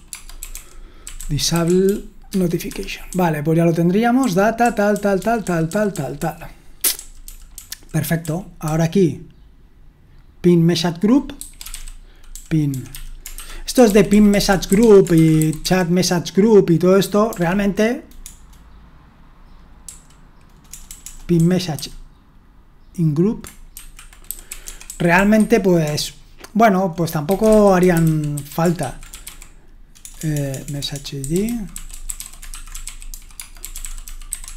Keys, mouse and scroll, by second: 0.0-4.9 typing, 2.7 Escape, 6.6-9.7 typing, 11.1-16.1 typing, 17.3-18.2 typing, 19.8-21.7 typing, 23.7-34.5 typing.